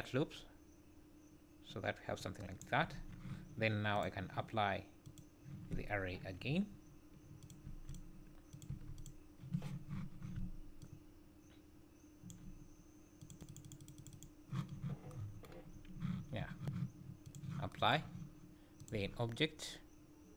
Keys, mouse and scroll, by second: 2.9 Tab, 3.9 click, 7.4 click, 8.5 click, 10.8 shift+click, 13.2-14.0 click, 13.3 click, 13.7 click, 13.8 click, 14.1 click, 14.7-15.0 scroll down 6, 15.8 scroll up 2, 17.3 click, 18.8 click.